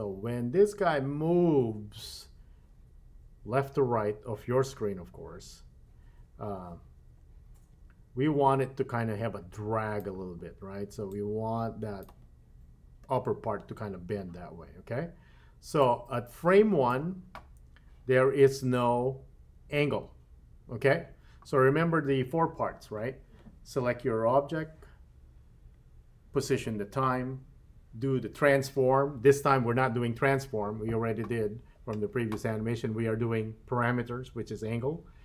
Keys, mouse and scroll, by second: 11.1-12.1 drag, 15.8-17.1 drag.